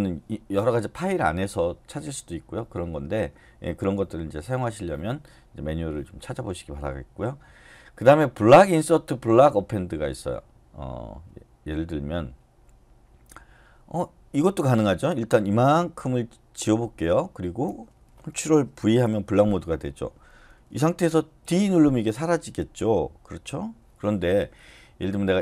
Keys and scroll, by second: 18.8 ctrl+v, 21.4 d.